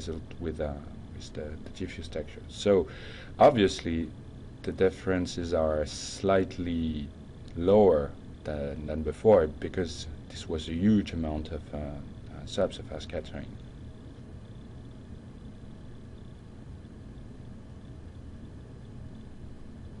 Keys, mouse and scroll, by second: 1.3-5.6 drag, 7.6-10.2 drag.